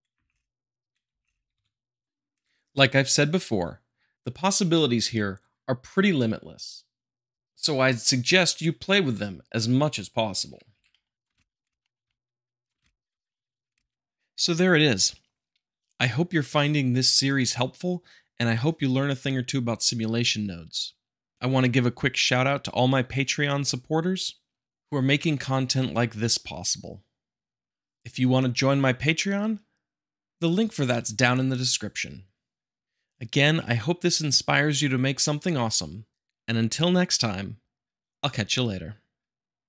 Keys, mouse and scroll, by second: 1.0 space, 1.5 `, 10.8 middle click, 11.1 click, 11.3 space, 11.6 space, 11.8 middle click, 12.1 middle click, 12.6 click, 12.8 shift+Left, 12.8 space, 13.7 space, 13.9 Right, 14.8 Left, 15.5 Right, 16.8 Up, 17.8-18.6 shift+middle drag, 18.8-19.2 middle drag, 21.8-22.9 shift+drag, 23.4 shift+Left, 23.8 Right, 25.2 click, 26.4 shift+Left, 26.5 Tab, 27.2 Right, 28.1-28.8 middle drag, 28.9 middle click, 29.2 shift+z, 29.9-30.7 middle drag, 32.2 `, 34.0-35.2 drag, 37.8-38.9 drag.